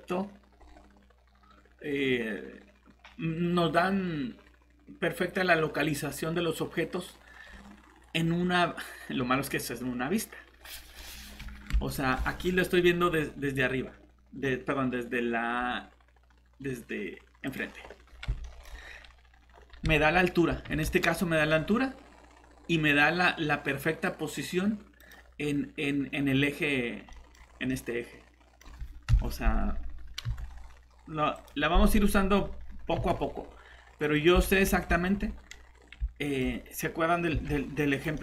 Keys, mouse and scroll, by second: 0.6 scroll up 1, 7.4 scroll down 1, 10.5-10.9 scroll up 1, 11.9 middle click, 12.1 scroll down 1, 17.5 click, 18.2 scroll up 1, 18.4 middle click, 18.8-19.3 scroll down 1, 25.0 click, 27.1 middle click, 27.3 scroll down 1, 27.7 middle click, 28.6 scroll up 1, 29.1 shift+7, 30.2 g, 31.3 click, 32.9 g, 34.4 middle click, 34.7 scroll down 1, 35.7-36.0 scroll up 1, 36.3 middle click, 37.3 shift+g, 37.9 click, 38.1 middle click.